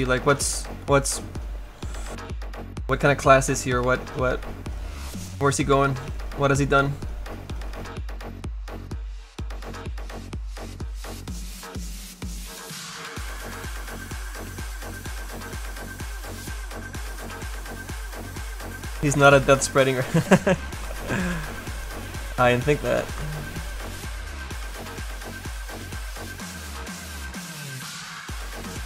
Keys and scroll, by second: 24.1 s.